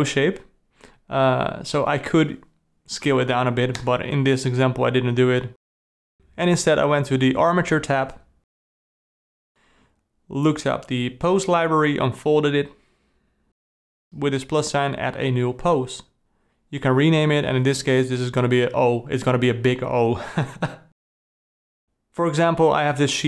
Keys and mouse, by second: 0.3 d, 0.4-1.3 ctrl+middle drag, 1.9 alt+a, 2.2 click, 2.7 a, 5.6 click, 9.5 ctrl+s, 10.1 click, 10.9 click, 13.5-14.8 drag, 15.9 click, 16.1-19.7 drag.